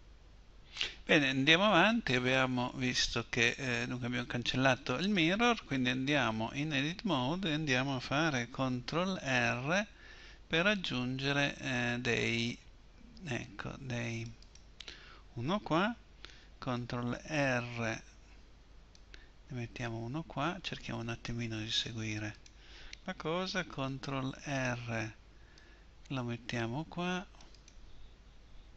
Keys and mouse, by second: 9.3 ctrl+r, 17.3 ctrl+r, 24.7 ctrl+r, 27.7-28.7 drag.